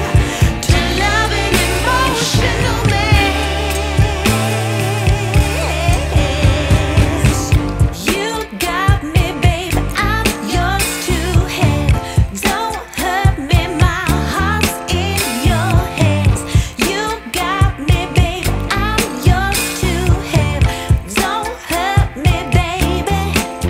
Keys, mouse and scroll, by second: 1.0 double click, 1.3 Return, 1.7 1, 2.8-3.3 scroll up 1, 3.3 middle click, 20.6-22.6 scroll down 1.